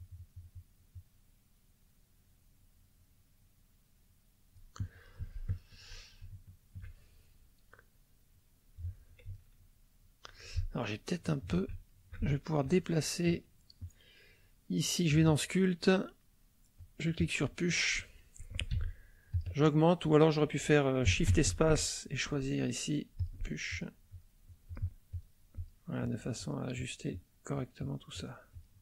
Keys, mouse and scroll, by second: 5.3 shift+middle click, 6.3 shift+middle click, 9.3-10.5 ctrl+middle drag, 10.9 ctrl+middle click, 11.9 ctrl+shift+middle click, 13.8-15.3 drag, 16.7 click, 18.7 f, 19.3 click, 21.3 shift+space, 23.2 click, 23.7 click, 24.1 click, 24.7 click, 25.1 click, 25.5 click, 26.0 click, 26.7 click, 27.1 click, 27.8 click.